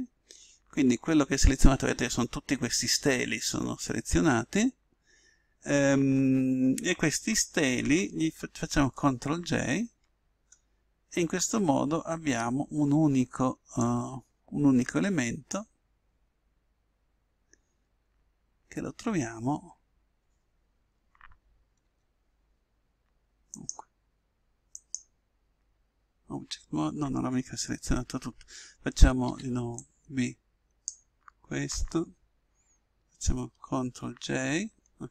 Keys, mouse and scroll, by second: 9.0 ctrl+j, 13.7 click, 18.4-23.5 middle drag, 21.8 Tab, 23.5-26.5 right drag, 29.2 b, 33.9 ctrl+j.